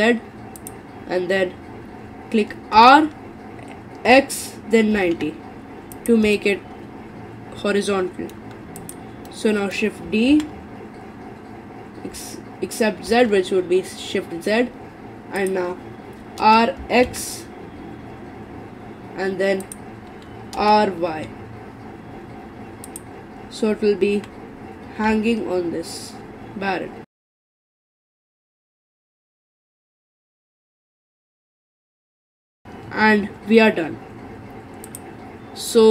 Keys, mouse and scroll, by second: 2.8 r, 6.4-8.8 middle drag, 8.8 click, 9.3-10.3 middle drag, 10.3 shift+d, 16.4 r, 20.6 r, 24.1 g, 27.2 middle click, 27.4 click, 27.4 middle click, 27.7-32.2 typing, 28.3 middle click, 29.4 middle click, 29.9 middle click, 30.6 middle click, 31.1 middle click, 31.7 middle click, 31.9 scroll down 4, 32.0 click, 32.0 middle click, 32.5-34.8 middle drag, 34.9 click.